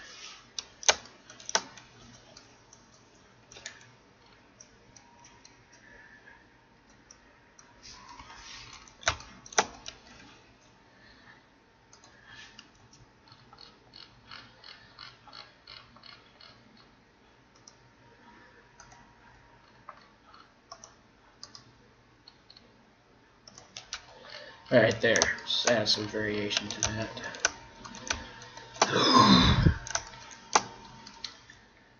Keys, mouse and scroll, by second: 1.0 middle click, 3.7 Tab, 7.3-8.6 middle drag, 8.1 KP_1, 9.9 Tab, 11.9 right click, 12.8 g, 13.6 right click, 18.7 right click, 19.2 g, 21.4 right click, 21.5 g, 24.0 Tab, 24.2 middle click, 25.3-31.9 middle drag, 26.6 Tab, 27.8 right click, 28.6 click, 28.9 right click, 29.6 click, 30.0 right click, 31.5 g.